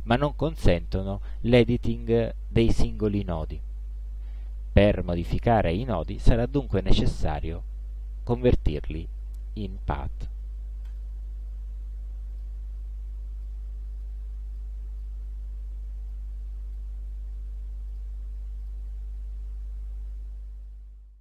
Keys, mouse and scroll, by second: 7.4 click, 8.4 click, 11.0 click, 12.4 click, 13.6-14.3 drag, 14.7 click, 16.2-17.1 drag, 18.0 click, 18.7 click.